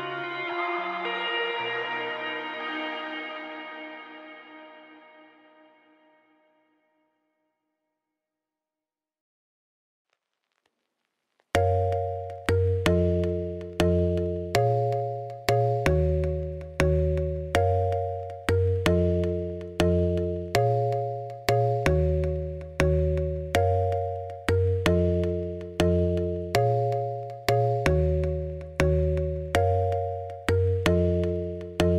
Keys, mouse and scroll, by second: 0.1 middle click, 0.4 g, 1.5 alt+s, 3.2 Tab, 3.3 click, 3.4 Tab, 3.7 z, 4.0 click, 4.4 ., 5.0 middle click, 5.3 s, 6.9 middle click, 7.1 scroll up 4, 7.3 a, 7.5 g, 8.5 click, 8.6-11.2 typing, 8.9 click, 12.7 middle click, 13.1 Tab, 13.3 z, 13.5-14.8 middle drag, 14.8 g, 15.7 click, 15.8 middle click, 15.9 g, 16.8 middle click, 17.7 Tab, 17.8 3, 17.9 click, 18.0-19.0 middle drag, 19.0 2, 19.1 middle click, 19.6 ctrl+click, 19.9 middle click, 20.2 z, 20.3 middle click, 20.8 alt+s, 21.7-23.3 middle drag, 24.9-26.3 drag, 26.3 ., 27.5 middle click, 28.3 z, 28.4-29.9 middle drag, 30.1-31.1 scroll down 7, 30.2 middle click, 31.1-31.9 drag.